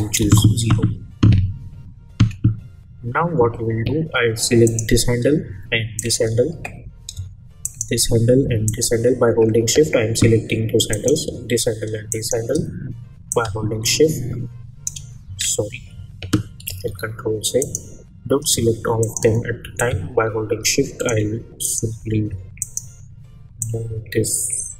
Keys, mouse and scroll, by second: 0.2 Return, 4.6 click, 6.0 shift+click, 7.6 shift+click, 12.1 shift+click, 13.3-16.7 drag, 16.7 ctrl+z, 17.6 click, 19.0 shift+click, 20.1-21.3 shift+drag, 22.6 shift+click, 23.9-24.7 shift+drag.